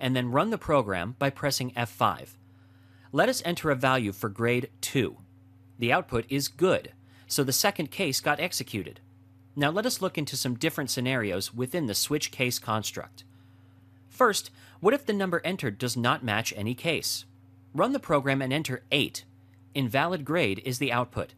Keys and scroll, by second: 2.1 F5, 16.3 F5, 17.0 F5.